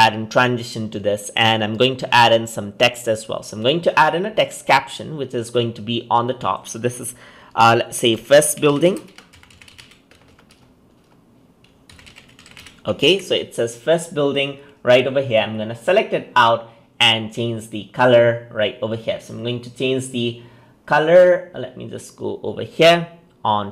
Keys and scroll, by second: 13.0 ctrl+a.